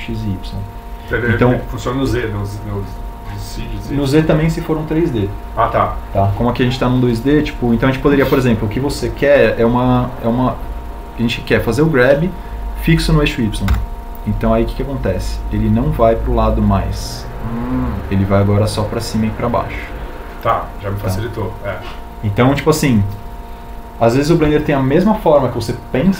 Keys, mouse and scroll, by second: 17.3 y.